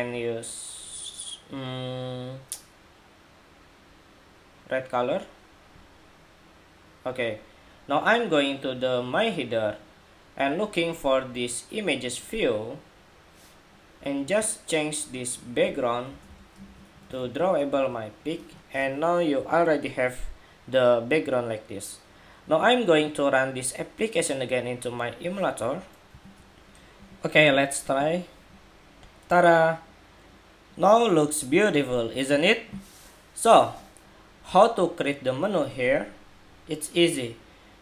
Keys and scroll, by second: 26.1 shift+super+2.